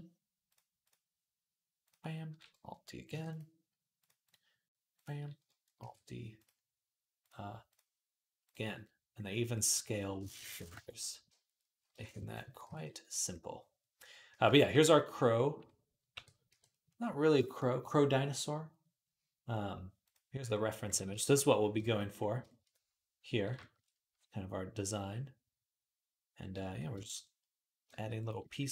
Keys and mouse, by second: 0.3 click, 0.4 middle click, 0.6 click, 0.7-11.7 middle drag, 2.9 alt+d, 5.6 alt+d, 7.0 click, 11.7 shift+click, 11.9 middle click, 12.3 ctrl+click, 12.5 ctrl+s, 13.1-28.1 middle drag, 15.9 t, 16.3 n, 19.9 click, 28.4 shift+middle click.